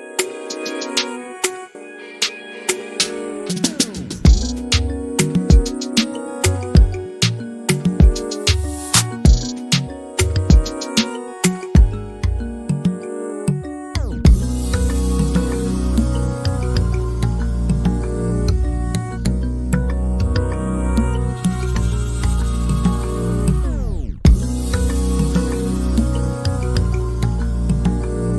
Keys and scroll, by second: 3.5 m, 7.8 e, 10.9 ctrl+z, 13.4 f, 15.2-17.4 typing, 19.0-21.8 typing, 22.9-23.7 typing.